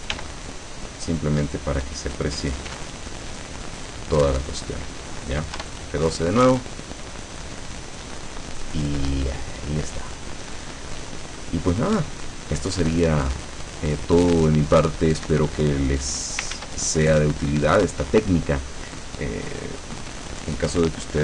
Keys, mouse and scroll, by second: 0.2 g, 0.4 click, 1.6 click, 2.8 g, 4.6 click, 5.6 F12, 15.4 Escape, 16.6 ctrl+s, 17.0 ctrl+click.